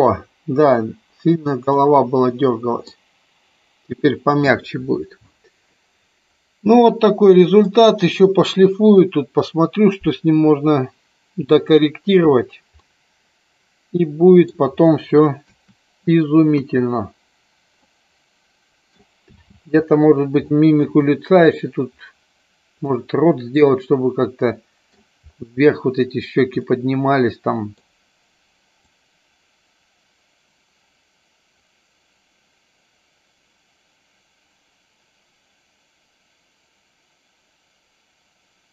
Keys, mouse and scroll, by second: 1.7-2.8 middle drag, 6.7 middle click, 12.8-14.5 middle drag, 16.5 KP_1, 17.8-18.9 middle drag, 20.5 shift+middle click, 22.9-24.8 middle drag, 26.7-27.8 middle drag, 28.9-38.7 drag.